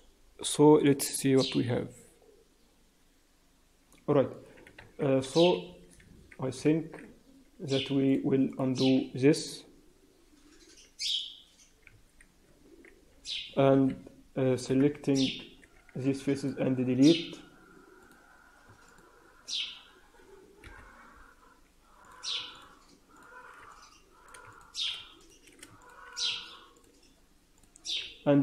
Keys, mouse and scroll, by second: 0.9-3.0 scroll down 2, 8.0 click, 8.4 click, 12.0 ctrl+z, 13.7 KP_3, 14.6 KP_1, 15.5-16.1 scroll up 2, 15.8 x, 17.9 click, 18.8 middle click, 20.5 KP_1, 21.9 click, 22.5 shift+click, 23.1 shift+click, 23.5 middle click, 24.4 shift+click, 25.1 shift+click, 25.8 shift+click, 26.7 shift+click, 27.5 shift+click, 28.3 F3.